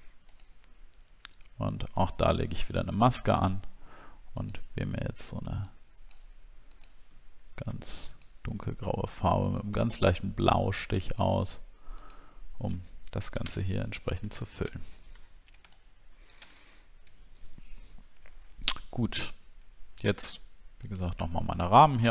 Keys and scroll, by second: 13.4 ctrl+BackSpace, 14.5 alt+scroll down 1, 16.7 alt+scroll down 7, 21.3 alt+scroll up 1, 21.9-22.1 alt+scroll up 2.